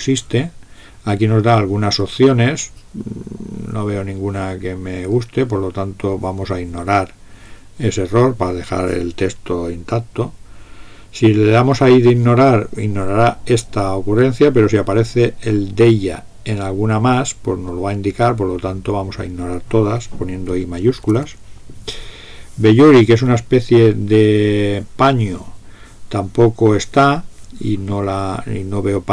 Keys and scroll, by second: 21.1 typing.